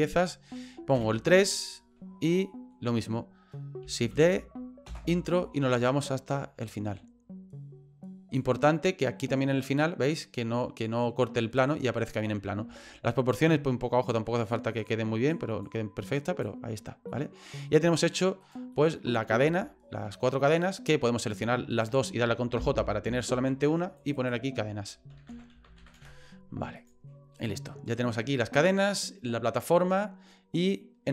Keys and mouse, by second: 0.9 KP_3, 2.4 shift+middle click, 4.2 shift+d, 6.0-8.4 drag, 12.9 shift+middle click, 14.1 click, 14.8 click, 15.6 click, 17.1 middle click, 17.6 right click, 18.4 right click, 18.8 middle click, 19.6 shift+middle click, 21.2 right click, 21.7 shift+right click, 22.6 ctrl+j, 24.0 click, 24.1-27.0 drag, 27.4 right click.